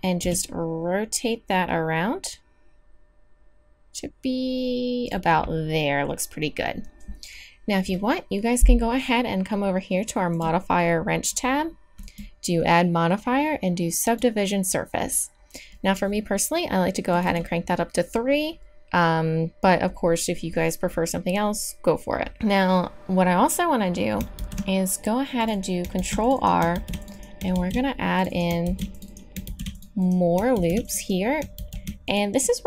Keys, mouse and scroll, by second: 0.2 r, 10.3-14.1 drag, 17.1-24.4 drag, 24.4 ctrl+r, 26.0 ctrl+r, 26.7 ctrl+r, 27.5 ctrl+r, 28.6 ctrl+r, 29.4 ctrl+r, 30.5 ctrl+r, 31.5 ctrl+r.